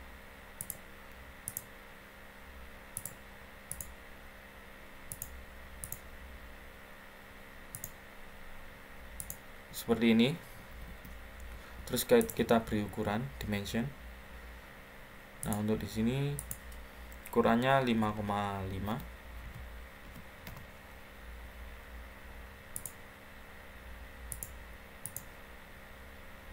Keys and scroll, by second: 10.5 Escape, 10.8 Escape, 17.9-19.9 typing, 20.4 Return.